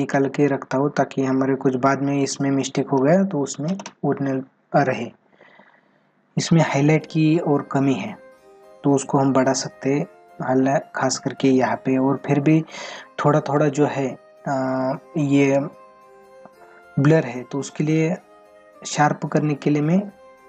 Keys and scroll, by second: 10.6 ctrl+-, 13.5 ctrl+-.